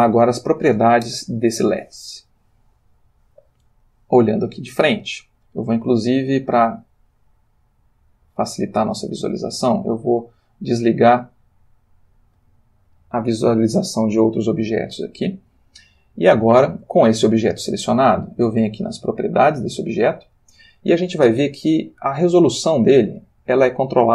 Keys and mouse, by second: 3.8 click, 7.7 click, 15.8-16.9 ctrl+middle drag, 19.8 click, 22.0-24.1 drag.